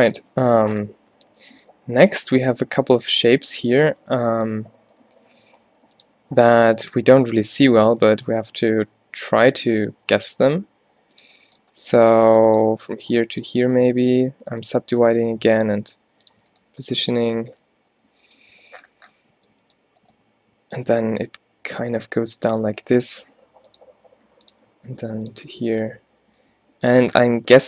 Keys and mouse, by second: 4.0 a, 4.1 click, 4.9 shift+d, 6.5 click, 7.3 g, 9.3 g, 10.2-11.5 middle drag, 11.9 g, 12.7 e, 14.4 alt+w, 14.8 g, 15.8 g, 16.5 Tab, 17.1 Tab, 17.5 a, 17.6 a, 18.6 a, 20.9 e, 22.7 e, 24.2 e, 24.6 e.